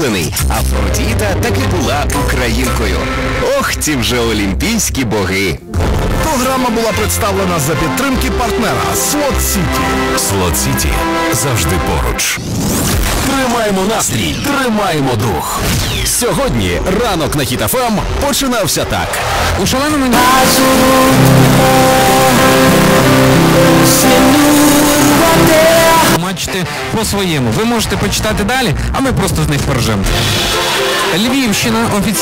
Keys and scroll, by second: 26.6 Page_Down.